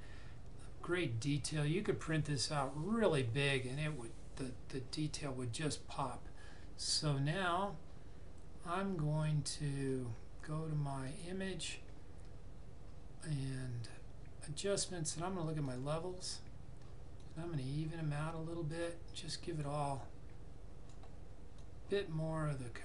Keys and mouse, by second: 11.0 click, 15.5 click.